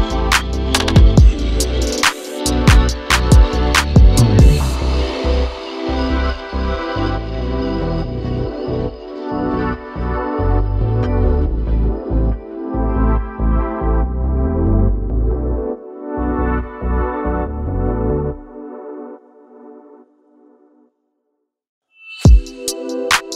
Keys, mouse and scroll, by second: 1.4-16.8 drag, 22.3-23.3 drag.